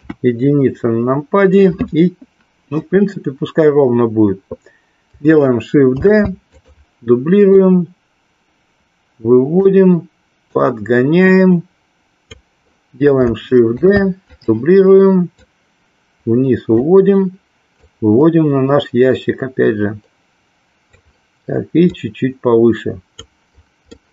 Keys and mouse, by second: 0.0 KP_1, 6.5 click, 7.5-9.5 drag, 10.5-12.2 drag, 14.2 click, 15.4-16.9 drag, 17.7-20.9 drag, 21.9-23.1 drag, 23.9-24.1 middle drag.